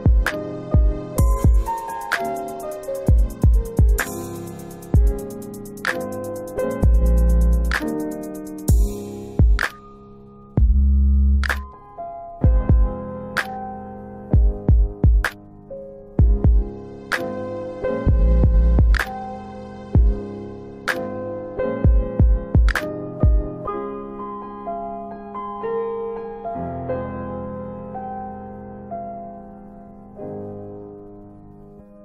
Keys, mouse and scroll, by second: 2.4 click, 8.4 middle click, 10.1 click, 10.6 middle click, 12.4 middle click, 14.1 click, 14.6 middle click, 16.1 click, 16.9 middle click, 17.3 scroll down 1, 18.3 middle click, 18.6-19.3 scroll up 2, 19.3 middle click, 24.9 click, 26.2 click, 27.4 middle click, 30.5 click, 31.6 middle click.